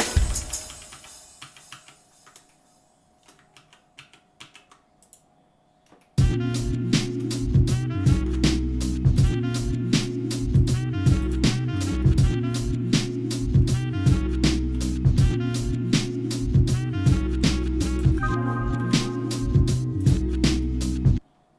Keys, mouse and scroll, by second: 0.4 ctrl+z, 1.0 ctrl+z, 1.4 ctrl+z, 1.8 ctrl+z, 2.5 shift+middle click, 3.5 ctrl+z, 4.1 ctrl+z, 4.6 ctrl+z, 5.0 click, 6.0-7.1 shift+middle drag, 8.1 ctrl+Tab, 9.9 click, 10.6 alt+shift+click, 11.3 alt+shift+click, 12.0-13.6 shift+middle drag, 14.7 f, 15.3 shift+middle click, 17.4 i, 18.8 alt+m, 20.6-21.5 shift+middle drag.